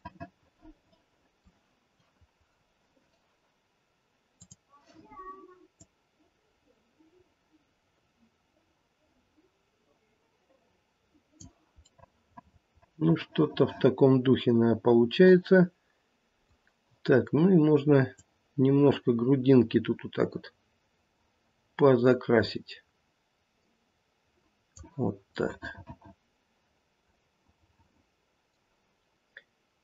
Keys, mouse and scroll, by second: 0.0 middle click, 0.1 middle click, 0.6 middle click, 1.1 middle click, 4.4 click, 5.8 click, 11.9 middle click, 12.3 middle click, 13.1 middle click, 13.8 middle click, 18.2 click, 25.3 middle click, 26.3 middle click, 26.5 middle click.